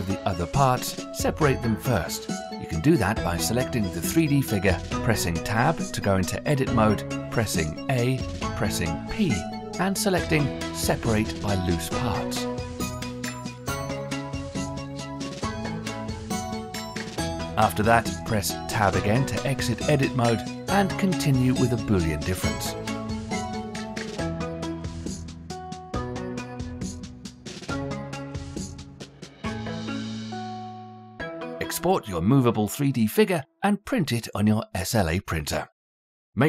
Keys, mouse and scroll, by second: 0.5 click, 2.4 Tab, 3.7 a, 6.0 2, 7.2-12.4 right drag, 12.4 a, 13.0 p, 16.9-17.4 scroll down 1, 17.4-19.3 middle drag, 19.3 Tab, 20.0 click, 20.7 scroll up 1, 21.0 click, 21.6-22.1 shift+middle drag, 22.1 scroll up 4, 22.8-23.5 middle drag, 23.5 scroll up 1, 23.6 g, 24.1-24.9 middle drag, 24.9 scroll down 2, 25.1 shift+middle click, 25.3-25.6 scroll up 1, 25.6 click, 25.8 g, 26.3 scroll down 1, 26.4-27.1 middle drag, 27.1 drag, 27.2 middle click, 27.3 g, 27.6 middle drag, 27.9 click, 28.4-29.1 scroll up 1, 29.4-30.6 drag, 36.4 click.